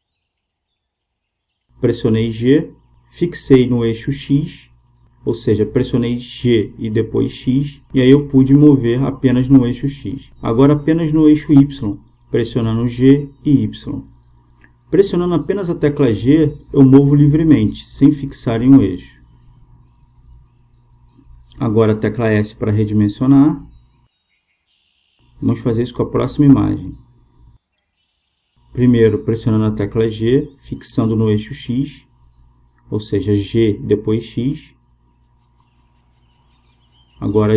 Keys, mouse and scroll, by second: 2.9 g, 9.8 g, 16.4 g, 24.3 s, 28.9-31.0 right drag, 31.2 g.